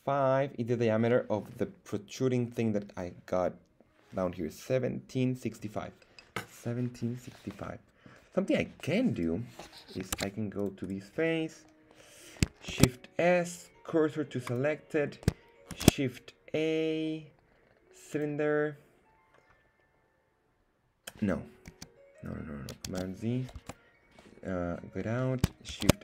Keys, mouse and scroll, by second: 7.6 middle click, 9.1 right click, 10.1 ctrl+Tab, 10.8 right click, 12.6 shift+s, 15.7 shift+a, 22.8 super+z, 23.6 Tab, 25.7 shift+a.